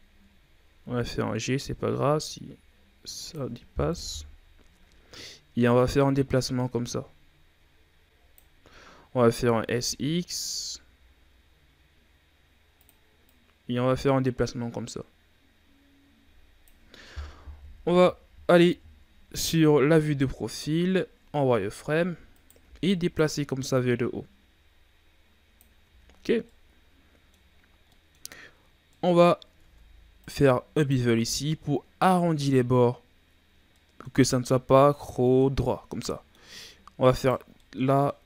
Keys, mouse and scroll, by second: 0.7 g, 3.9 KP_1, 5.7-8.6 drag, 8.6-9.3 scroll up 2, 9.3 s, 13.2-16.3 drag, 17.6 KP_3, 20.0 z, 20.0-20.5 scroll up 4, 20.5-21.5 scroll down 6, 21.5-22.0 shift+scroll up 4, 22.3 right click, 22.6 b, 23.7-25.8 drag, 25.8 z, 26.1-26.4 scroll down 3, 26.4-27.5 middle drag, 27.5 scroll up 1, 27.8 middle click, 28.3-28.7 scroll up 1, 28.7 scroll down 1, 28.9 middle click, 29.6 ctrl+Tab, 30.7 right click, 31.2-34.2 middle drag, 34.2-35.2 scroll up 1, 35.2-37.1 middle drag, 37.1 shift+right click, 37.6-38.2 middle drag.